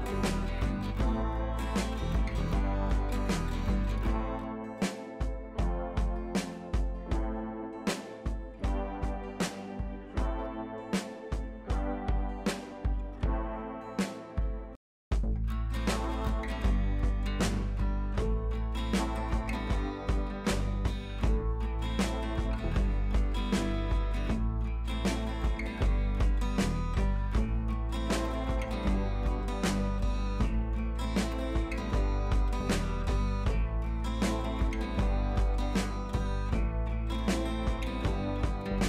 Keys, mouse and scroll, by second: 1.6-2.8 drag, 7.9-13.7 drag, 14.2 scroll down 1, 14.9 scroll up 1, 16.4-17.1 alt+click, 19.0-19.7 click, 20.0 ctrl+c, 20.6 click, 21.5 ctrl+v, 23.0 ctrl+a, 24.5-25.0 click, 25.8-26.8 drag, 27.6-30.2 drag, 37.0-38.8 drag.